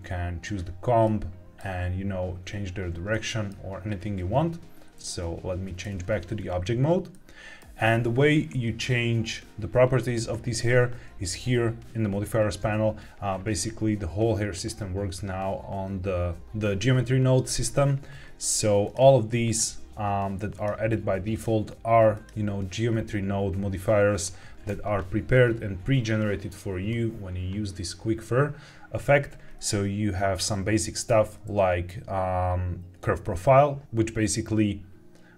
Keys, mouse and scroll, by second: 1.0-1.5 middle drag, 3.0 middle click, 4.9 ctrl+Tab, 7.0 shift+middle click, 18.7 click, 19.4 click, 20.4 click, 21.2 click, 22.0 click.